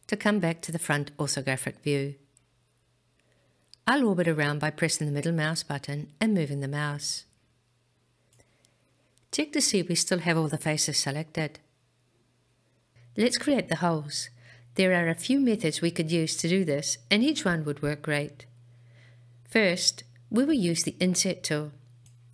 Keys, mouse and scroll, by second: 3.2-4.8 middle drag, 5.5-6.1 scroll down 1, 6.1-9.6 middle drag, 12.9-14.2 shift+middle drag, 14.6-18.3 middle drag.